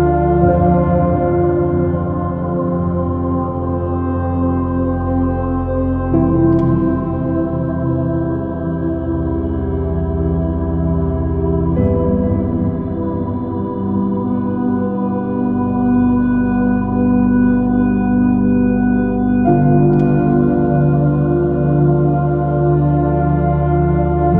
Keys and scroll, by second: 2.5 BackSpace, 4.9 super+i, 7.2 super+-, 22.4 BackSpace, 23.2 super+i.